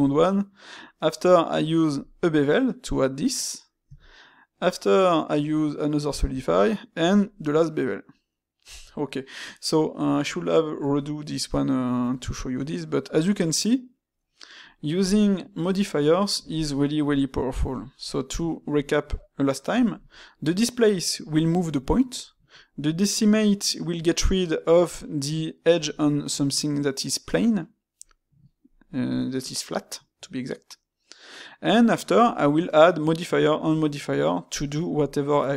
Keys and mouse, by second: 1.0-10.2 middle drag, 12.7-15.0 middle drag, 16.7-22.1 middle drag, 22.7-25.7 middle drag, 31.0-34.0 middle drag.